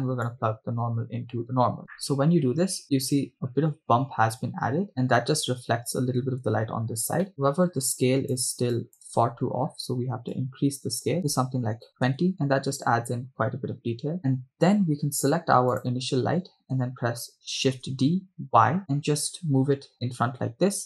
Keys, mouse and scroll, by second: 0.3 click, 0.7-1.8 drag, 3.9-4.4 scroll up 5, 4.9-5.3 scroll down 3, 7.2 shift+middle click, 8.8 click, 10.4-12.3 drag, 14.1-14.7 scroll down 2, 14.7 scroll down 1, 15.7 click, 17.8 shift+d, 18.4 y.